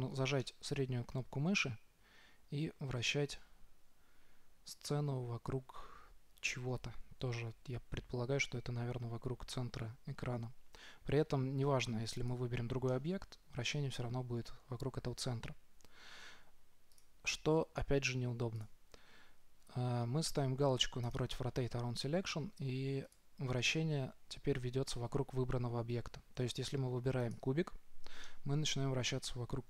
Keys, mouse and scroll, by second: 0.7-2.7 middle drag, 12.6-13.5 right drag, 13.2 middle click, 13.9 right click, 14.4 middle click, 23.6-25.3 drag, 27.6-29.5 right drag, 28.7 middle click, 29.5-29.6 middle drag.